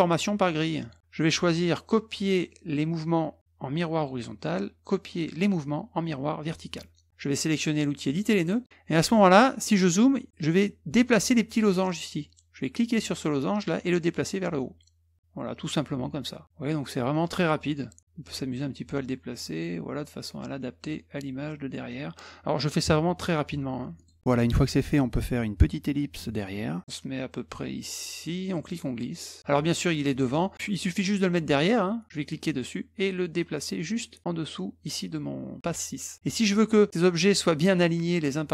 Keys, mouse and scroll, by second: 0.6 click, 4.0 click, 6.4 click, 8.1 click, 8.9 middle click, 9.5 middle click, 12.7-21.9 drag, 24.0 click, 24.2 middle click, 25.9 click, 28.6 click, 32.1-33.9 drag.